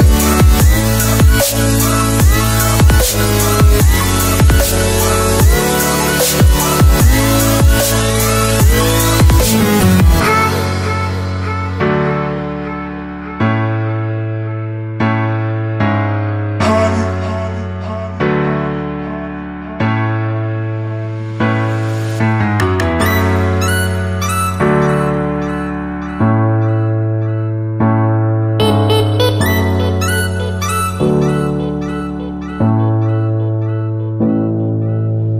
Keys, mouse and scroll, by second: 10.0-10.8 scroll down 1, 10.8 click, 11.5-12.2 scroll up 1, 13.2 click, 19.3 s, 20.6 click, 23.6 f, 24.3 click, 26.6 ctrl+s, 28.4 click.